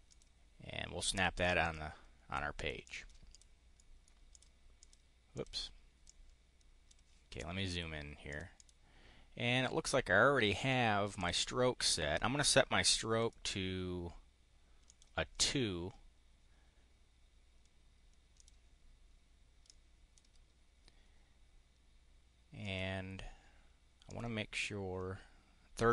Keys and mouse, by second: 0.0 click, 1.0 click, 1.5 click, 2.4 click, 2.7 click, 3.1 click, 3.6 click, 3.8 click, 4.6 click, 5.3 click, 5.9 click, 8.2 click, 8.5 click, 11.0 click, 13.1 click, 14.8 click, 18.2 click, 19.6 click, 22.6 click, 24.0 click.